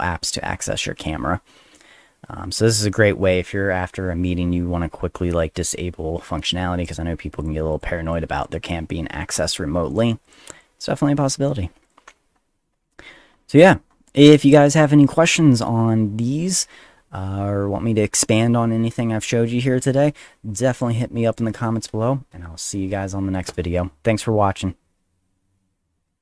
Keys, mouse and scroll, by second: 6.9 click, 7.4 click, 7.7 click, 8.0 click, 8.4 click, 8.8 middle click, 9.3 click, 9.9 click, 10.2 click, 10.5 click, 11.8 click, 12.3-13.8 middle drag, 12.3-13.8 scroll down 2, 13.9 middle click, 13.9 scroll down 2, 14.7 click, 20.7 click, 21.2 click.